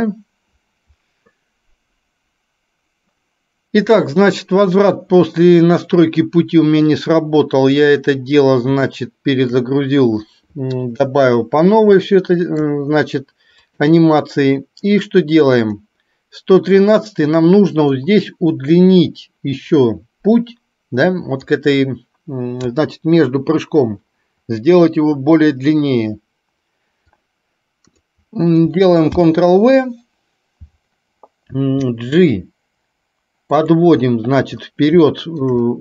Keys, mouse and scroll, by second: 7.1-8.0 drag, 9.1-9.6 shift+middle drag, 12.1-12.9 shift+middle drag, 13.7 click, 15.4 click, 18.1-21.6 drag, 27.2-28.2 drag, 29.2 ctrl+v, 31.6 g, 35.2 shift+middle drag.